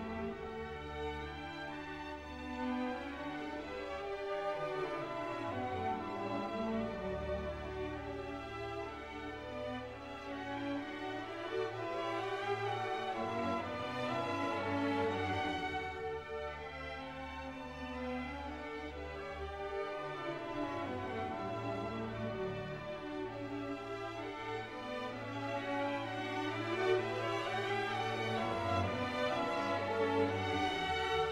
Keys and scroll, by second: 2.1 alt+Delete, 2.7 ctrl+alt+z, 4.1 alt+Delete, 7.1 ctrl+d, 8.9 ctrl+t, 23.5 ctrl+z, 28.9 Right, 29.4 Up, 30.4 Left.